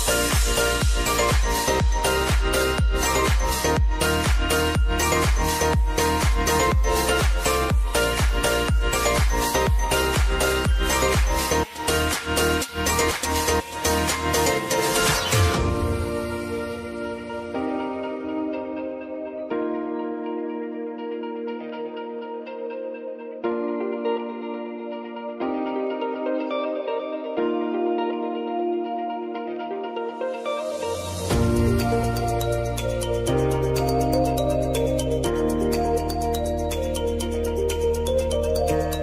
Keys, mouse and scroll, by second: 0.4 click, 2.9 Return, 3.4-4.6 typing, 5.4 F4, 7.1 click, 14.7 ctrl+a, 15.2-16.5 typing, 17.8-23.1 drag, 27.7 scroll down 1, 29.7 click, 36.0 shift+click, 38.6 click.